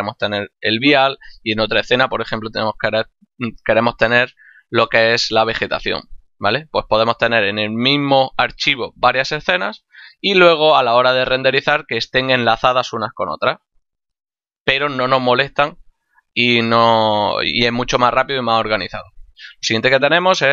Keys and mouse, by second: 7.3 click, 9.8 click, 20.1 click.